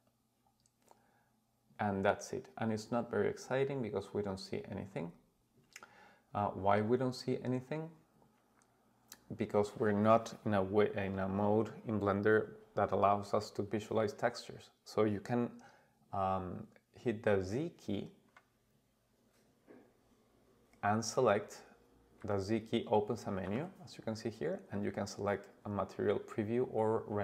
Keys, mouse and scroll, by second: 4.3-7.3 scroll up 5, 7.3-8.1 scroll up 1, 18.3 z, 23.4 z.